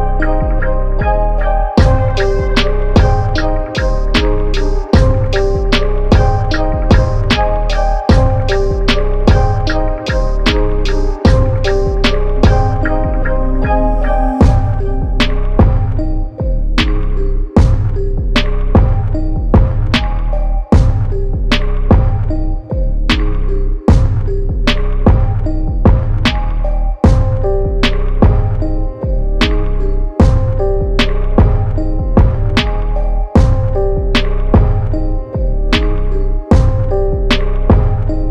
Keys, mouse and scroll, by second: 0.6 click, 1.0-2.5 scroll up 1, 2.8 e, 4.6 s, 6.2-7.8 drag, 8.1 click, 8.8 s, 10.0 click, 11.1 s, 12.3 click, 13.2 click, 14.2 r, 15.7 s, 17.0 Tab, 17.3 middle click, 18.0 Tab, 20.8 Delete, 21.5 middle click, 22.2 ctrl+z, 22.5 middle click, 23.4 Delete, 24.5 Tab, 24.8-26.3 middle drag, 27.0-27.4 scroll down 1, 27.4 middle click, 27.9 click, 28.2-29.2 scroll up 1, 29.2 Tab, 29.8 click, 30.3-31.6 drag, 32.0 click, 33.0 click, 34.0 click, 35.9 ctrl+z, 36.1 ctrl+z, 36.4 ctrl+z, 37.0 Tab, 37.8 click.